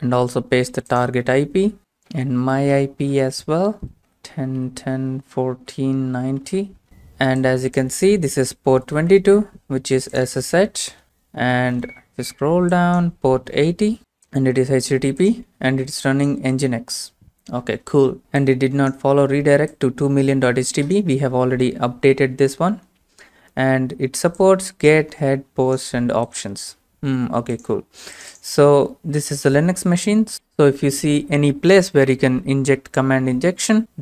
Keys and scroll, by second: 1.8 ctrl+c, 1.8 alt+Tab, 1.8 ctrl+v, 1.8 Return, 1.8-7.0 typing, 8.7 alt+f, 9.1 Return, 10.8 alt+f, 11.0 Return, 13.7-14.5 typing, 29.3 alt+f, 29.9 Return.